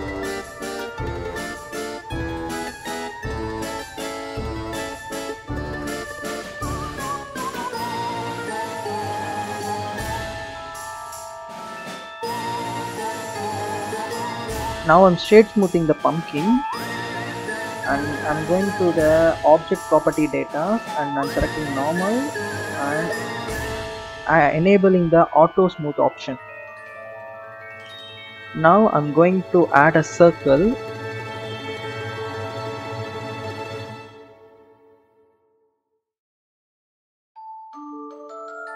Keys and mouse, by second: 0.6 click, 1.0 click, 2.1 click, 2.8 click, 3.3 click, 4.6 click, 6.9 alt+shift+click, 7.5 alt+shift+click, 7.9 click, 8.2-9.2 drag, 9.6 click, 12.1 Tab, 13.3-14.7 right drag, 15.7-16.6 right drag, 20.2 click, 21.2 click, 23.0 click, 26.6 click, 27.1 click, 28.6 shift+a, 32.7-37.4 drag.